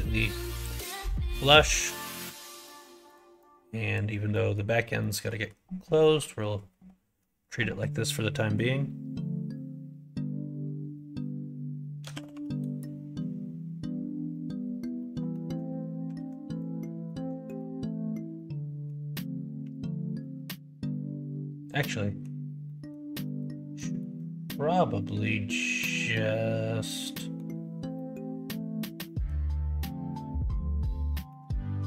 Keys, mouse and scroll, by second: 0.1 middle click, 0.5 scroll up 1, 0.5 middle click, 0.7 scroll down 1, 0.9-1.6 scroll up 2, 1.1 middle click, 1.6 middle click, 1.7 scroll down 1, 2.2 alt+click, 3.4 click, 4.3 middle click, 5.0 middle click, 5.9 middle click, 12.0 s, 15.2 middle click, 16.1 alt+z, 16.4 click, 17.0 middle click, 17.5-18.8 middle drag, 19.5 KP_1, 21.6 middle click, 22.6 middle click, 23.2 middle click, 23.8 middle click, 24.2-27.3 middle drag, 27.9 middle click, 29.0 middle click, 29.7-30.8 middle drag, 31.2-31.8 middle drag.